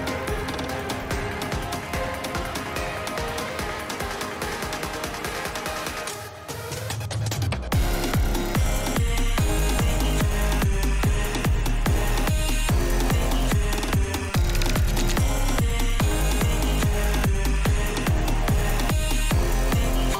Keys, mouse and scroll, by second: 0.9 shift+middle click, 1.9 click, 2.7 g, 3.9 middle click, 4.3 click, 5.0 g, 6.9 shift+middle click, 7.4 click, 8.2 g, 10.4 middle click, 10.9 shift+middle click, 11.8 g, 15.8 click, 16.3 g, 18.0 click, 18.3 g.